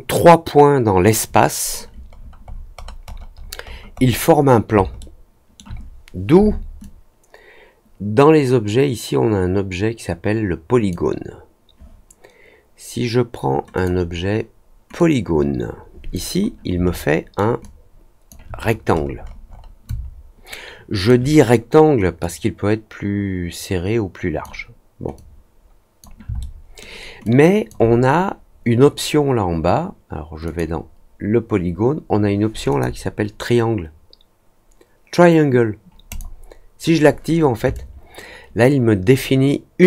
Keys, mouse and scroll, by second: 2.1 scroll down 1, 2.4 scroll up 2, 2.7-4.1 scroll down 10, 4.9 alt+middle click, 6.7-10.8 drag, 13.7 click, 14.9-16.1 drag, 16.9 alt+middle click, 17.5 alt+click, 18.5 middle click, 18.8 middle click, 19.2 middle click, 19.4 middle click, 19.8-21.0 alt+drag, 22.1-24.4 drag, 25.1 click, 26.3 alt+middle click, 27.2 alt+click, 30.4 click, 32.6 click, 36.0 click, 37.7-39.8 alt+drag.